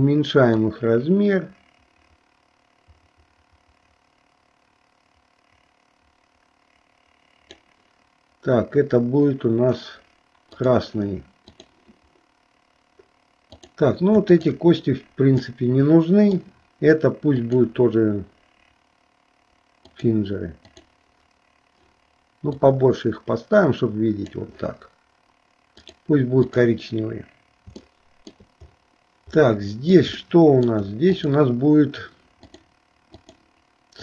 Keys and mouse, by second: 0.6-7.8 drag, 11.5 click, 13.5 click, 14.5 shift+click, 15.7 middle click, 17.4-20.2 drag, 20.9 click, 22.5-24.4 drag, 26.0 click, 26.6 click, 28.1 shift+middle click, 29.6 middle click, 30.3 shift+middle click, 31.3 click, 32.5 click.